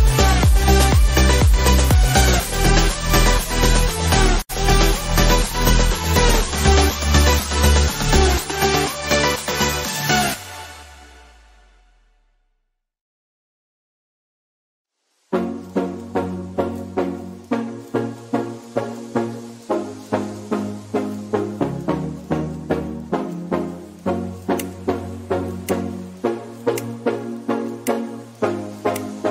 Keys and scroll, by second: 15.8 ctrl+d, 16.6 ctrl+z, 17.5 ctrl+j, 26.1 ctrl+z, 28.4 ctrl+j.